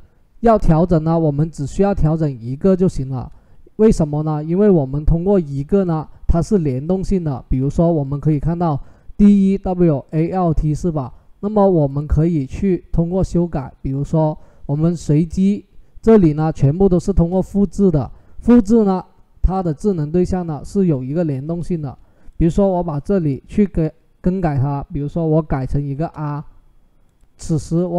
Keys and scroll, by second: 25.5 r.